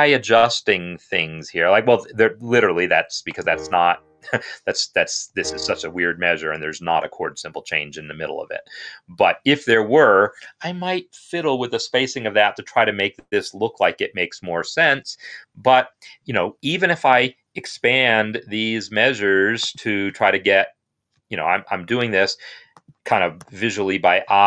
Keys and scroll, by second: 5.1 Escape, 17.8 shift+], 18.0 shift+], 18.2 shift+], 19.9 shift+], 20.9 shift+], 23.2 shift+[.